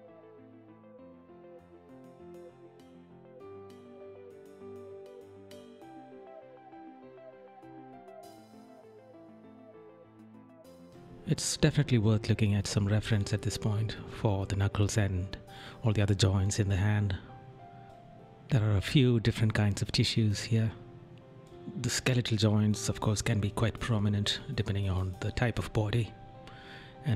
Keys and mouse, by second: 0.7 right click, 1.9 right click, 3.5 right click, 8.4 right click, 9.6 ctrl+right click, 10.6 right click, 11.5 right click, 12.7 right click, 13.5 right click, 15.0 right click, 16.1 right click, 16.6 right click, 17.5 right click, 19.5 right click, 20.6 right click, 22.0 right click, 24.8 right click.